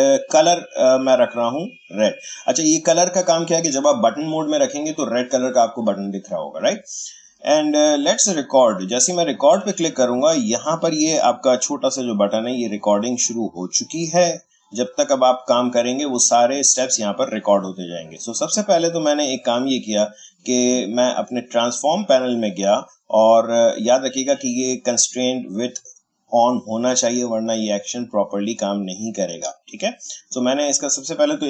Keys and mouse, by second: 0.9 click, 9.1 click, 19.6-23.8 drag, 29.9-31.4 drag.